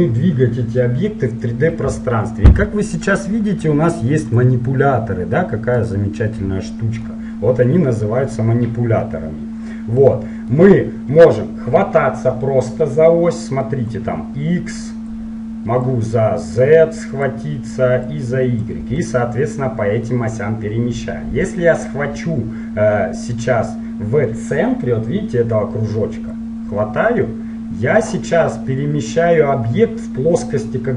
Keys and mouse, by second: 3.0-6.3 right drag, 4.4-7.6 drag, 7.6-10.0 middle drag, 10.2-11.9 middle drag, 14.0-16.0 drag, 16.0-19.2 drag, 19.2-20.8 middle drag, 26.5-28.3 drag.